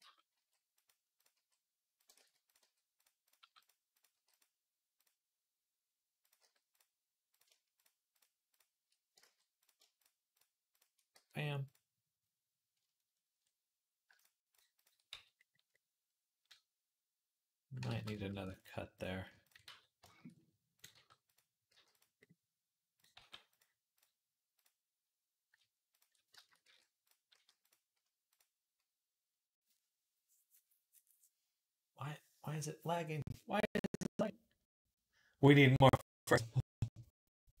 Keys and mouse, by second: 0.2 g, 1.2 g, 1.3-5.0 middle drag, 2.0 ctrl+z, 2.2 click, 2.2 right click, 2.4 g, 3.2 g, 4.0 g, 6.0 click, 6.2 g, 7.3-8.7 shift+middle drag, 9.0 ctrl+z, 9.6-10.7 shift+middle drag, 11.0 f, 12.6-14.3 ctrl+middle drag, 14.3 shift+click, 14.4 shift+middle click, 14.5 shift+click, 14.6-15.8 shift+middle drag, 14.9 f, 17.7 ctrl+z, 18.1 ctrl+r, 19.5 f, 19.9-37.6 shift+middle drag, 20.7 g, 21.5 g, 23.0 g, 26.5 e, 27.1 s.